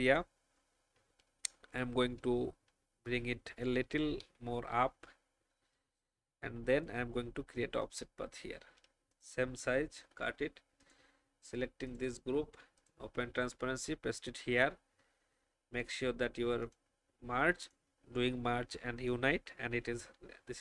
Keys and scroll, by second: 2.6 alt+shift+Up, 3.9 alt+shift+Up, 6.6 ctrl+alt+f, 9.9 ctrl+x, 13.3 ctrl+f.